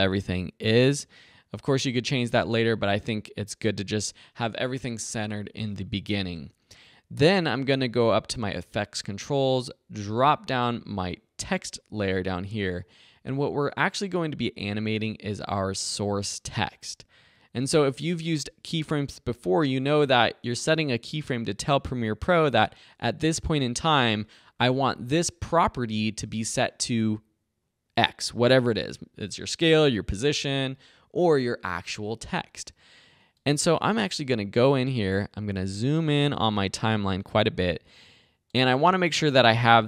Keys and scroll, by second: 36.4 =.